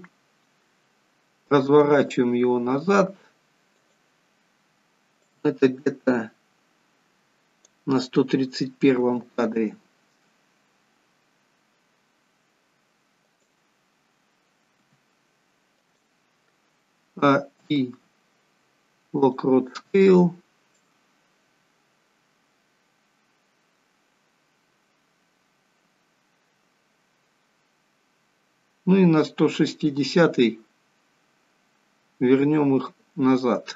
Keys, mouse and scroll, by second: 0.7-1.4 scroll down 1, 1.8 r, 5.4 click, 9.1 r, 14.9 r, 17.0 a, 17.6 a, 17.7 a, 17.7 i, 21.5 click, 30.2-31.7 scroll down 4, 31.7 scroll down 1.